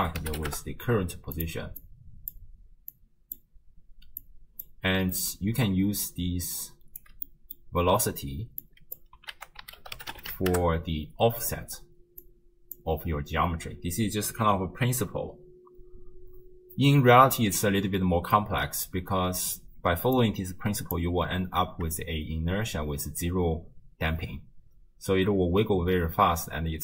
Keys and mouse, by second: 1.8 click, 2.9-3.4 drag, 4.2 click, 5.5 d, 5.6-7.1 drag, 7.1 d, 8.6 middle click, 9.4 ctrl+a, 12.2-12.8 middle drag, 17.4 middle click, 20.2 click, 24.3 space.